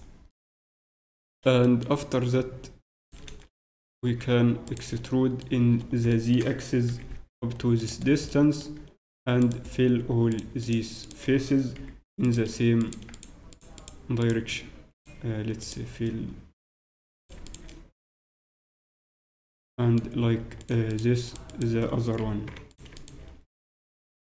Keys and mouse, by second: 0.3-6.1 middle drag, 3.0-6.1 right drag, 6.1-7.8 drag, 7.8-9.4 middle drag, 7.8 e, 9.4 right click, 9.6-11.8 drag, 11.8-16.8 right drag, 11.8 f, 16.8 a, 17.2-18.5 right drag, 18.5 f, 19.0 f, 20.1 middle click, 20.6 right click, 21.0-24.2 drag, 22.2 f, 24.0 f.